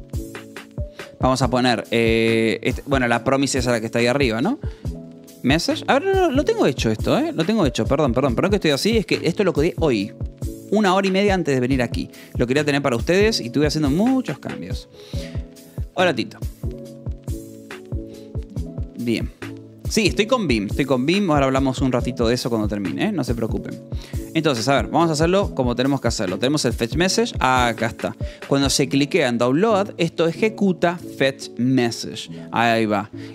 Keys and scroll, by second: 4.7-6.4 typing, 7.7 k, 12.2 o, 12.9 Escape, 13.1 u, 13.9 ctrl+s, 14.9-15.9 typing, 19.4-21.5 typing, 24.4 l, 24.9 f, 25.6 v, 26.0 y, 27.4 j, 28.8 k, 29.2 j, 29.7 Escape, 29.9 k, 30.6 f, 31.9-33.3 typing, 32.3 Escape.